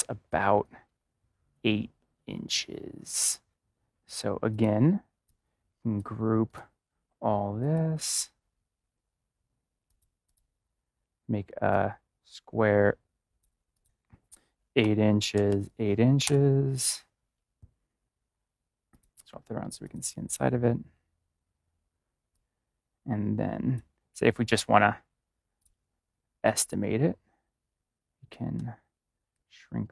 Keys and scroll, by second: 14.7 8, 15.3 Tab, 15.4 8, 16.1 Return.